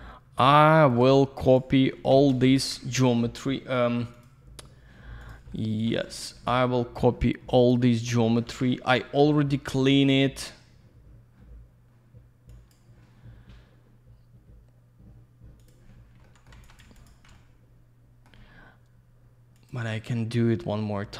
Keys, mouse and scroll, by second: 1.2 click, 1.4 click, 1.6 click, 2.6 ctrl+a, 4.1 click, 4.2 click, 5.2 click, 5.3 click, 5.5 alt+middle click, 5.6 alt+click, 6.1 click, 6.2 click, 6.5 alt+middle click, 7.6 click, 7.7 click, 8.5 ctrl+ϕ, 9.8 click, 9.9 click, 12.5 click, 15.6 click, 15.7 click, 16.2 alt+middle click, 16.5 alt+я, 16.6 click, 16.8 click, 16.9 click, 17.1 double click, 17.3 alt+middle click, 19.5 click, 19.7 click.